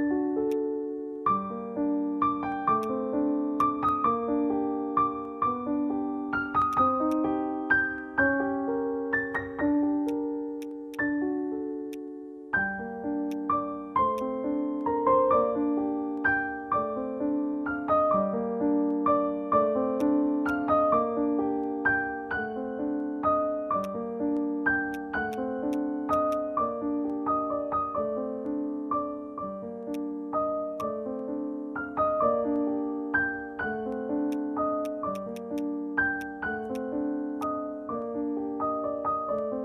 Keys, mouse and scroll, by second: 0.0-1.5 scroll down 1, 2.2-2.7 scroll up 2, 3.1 alt+middle click, 3.1 click, 5.9 alt+middle click, 6.1 scroll down 1, 6.4 scroll up 1, 6.9 alt+click, 10.0 alt+click, 10.5 alt+click, 12.0 scroll down 1, 12.6 scroll up 1, 13.0 alt+middle click, 13.3 alt+click, 13.6-16.0 scroll down 1, 19.0-19.3 scroll up 1, 19.4 alt+middle click, 19.7 scroll down 1, 20.0 alt+click, 23.3 scroll up 1, 23.8 alt+click, 24.3 alt+middle click, 24.5 scroll down 1, 25.2 alt+click, 25.3 right click, 26.3 double click, 30.2 alt+click, 30.3 scroll down 1, 33.2 scroll up 1, 34.0 alt+middle click, 34.3 alt+click, 34.8 alt+click, 36.2 alt+click, 36.7 alt+click, 37.1 alt+middle click.